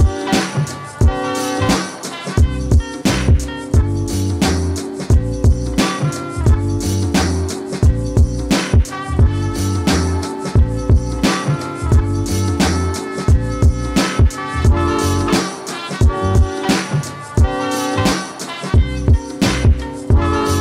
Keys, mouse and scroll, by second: 0.1-4.7 drag, 7.3 click, 9.9 right click, 14.1 click, 17.1 click.